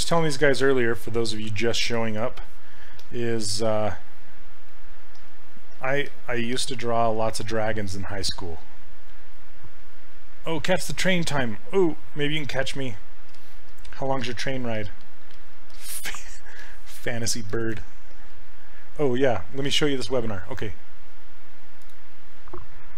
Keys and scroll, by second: 13.4 s.